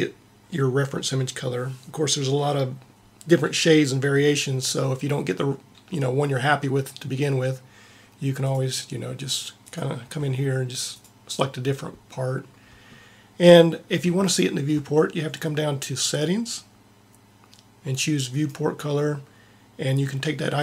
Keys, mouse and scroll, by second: 8.4-10.0 drag, 16.0-17.7 drag, 18.2-20.2 drag.